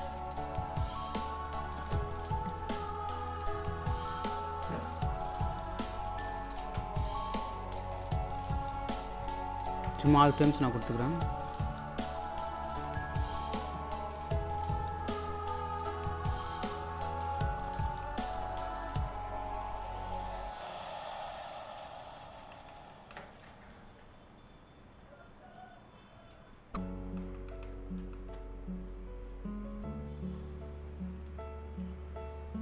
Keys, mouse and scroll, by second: 1.1-2.1 scroll down 1, 2.5-3.9 scroll down 1, 3.9 scroll up 1, 6.7 space, 8.4 click, 14.3 click, 14.6 scroll down 1, 17.0 scroll up 1, 17.3 shift+Right, 19.1-20.6 drag, 20.6 scroll up 1, 21.3 click, 22.4 shift+Right, 23.7-27.0 alt+drag, 27.0 shift+Right, 28.9-32.6 drag.